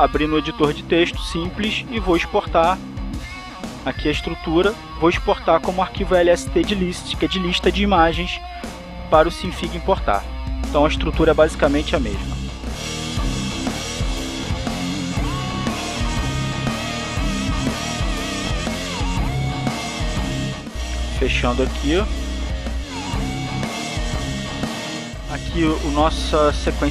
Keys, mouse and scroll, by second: 1.9 click, 2.8 alt+Tab, 3.4 Tab, 20.7 click, 22.2 click, 25.6 click.